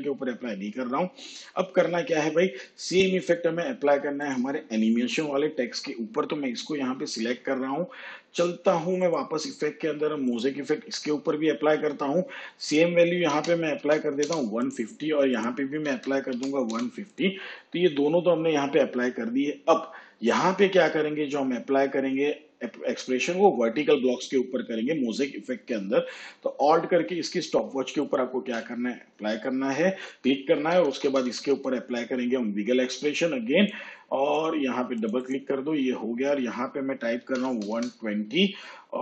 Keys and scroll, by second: 13.3 1, 13.7 5, 14.2 0, 15.8 1, 16.3 5, 16.7 0, 30.7 w, 30.8 i, 31.0 g, 31.5 l, 37.2 1, 37.4 2, 37.7 0.